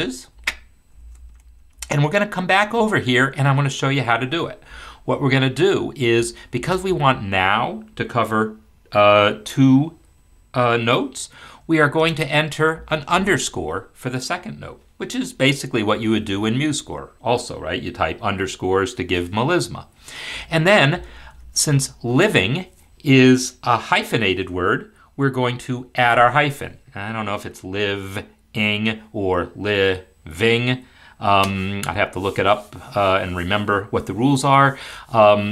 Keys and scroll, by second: 0.3 ctrl+z, 0.9 ctrl+z.